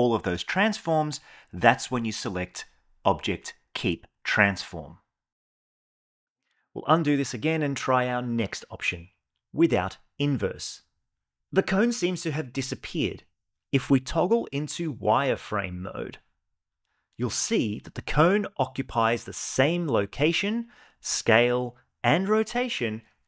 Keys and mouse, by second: 0.3 shift+click, 1.4 ctrl+p, 8.9 ctrl+p, 13.8 click, 15.0-19.5 shift+middle drag, 20.3-21.0 middle drag.